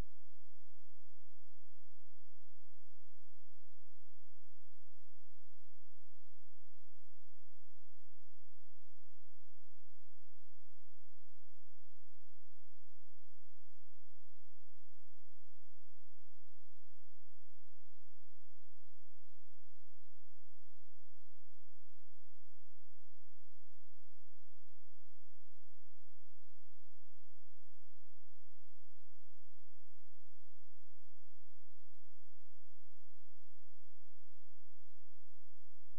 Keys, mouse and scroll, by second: 2.1 click, 4.6 click, 11.7 click, 17.1 space, 17.3 click, 17.8-18.8 scroll down 1, 18.8 click, 20.9 ctrl+click, 24.5 space, 25.7 click, 28.4 shift+Page_Down, 29.5 click, 30.0-30.6 scroll up 1, 30.6-31.3 scroll, 31.3 click, 31.9-32.9 scroll down 1, 32.9 click, 33.2 right click, 34.2 click.